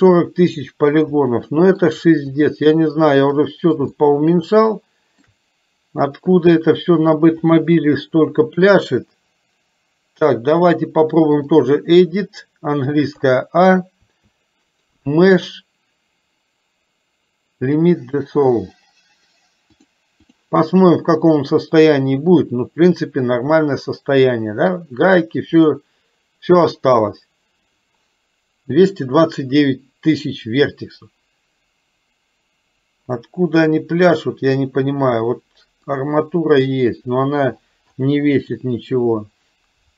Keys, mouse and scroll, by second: 1.4 shift+middle click, 2.4 click, 3.5 middle click, 4.0-5.4 shift+middle drag, 7.5-11.8 drag, 13.3 a, 14.2 a, 15.2-18.1 drag, 19.8 click, 22.6-24.8 middle drag, 25.6-26.8 middle drag, 36.1 click, 39.0 click.